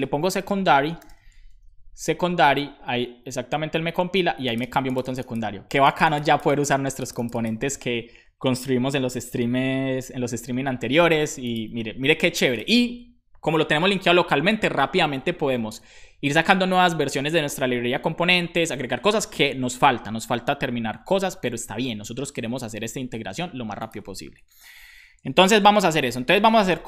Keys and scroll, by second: 0.0-1.5 typing, 25.4 ctrl+c, 25.9-26.8 typing.